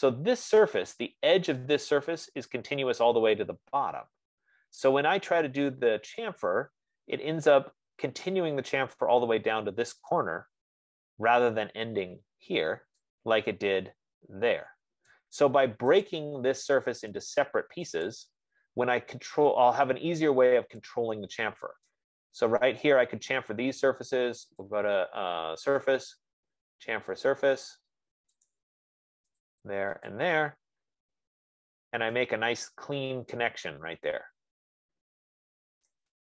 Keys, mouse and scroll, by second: 0.4 click, 1.3-2.1 scroll, 15.5 right click, 16.4 click, 17.8 click, 18.4 click, 22.4 right click, 22.8 middle click, 23.3 middle click, 25.2 click, 29.0 click, 29.7 click, 30.5 click, 31.8-32.1 scroll, 35.2 scroll, 36.1 right click.